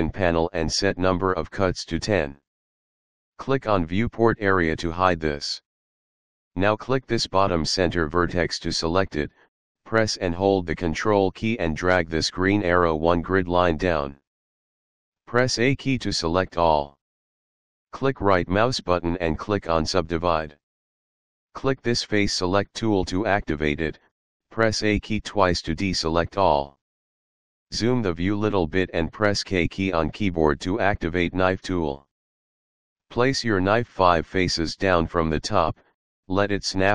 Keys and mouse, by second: 0.2 click, 2.1 click, 4.2 click, 9.1 click, 11.7 ctrl+click, 16.2 a, 17.5 right click, 19.4 click, 23.5 click, 25.9 a, 30.3 k.